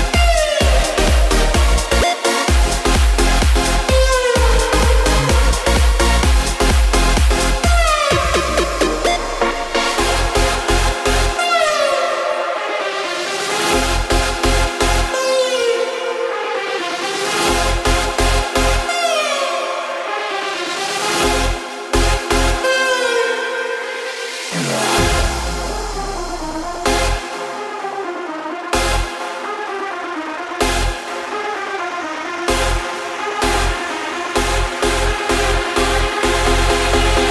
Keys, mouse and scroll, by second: 0.5-22.4 drag, 23.8-30.7 drag, 30.7 space.